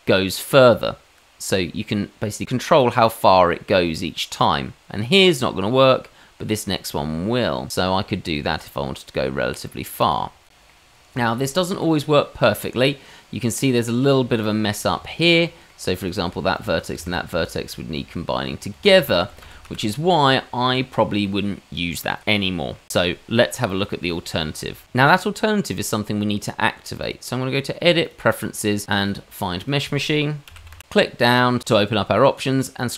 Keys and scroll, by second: 14.9 Tab, 16.9 1, 18.7 ctrl+z, 18.9 ctrl+z, 19.2 ctrl+z, 19.4 ctrl+z, 19.6 ctrl+z.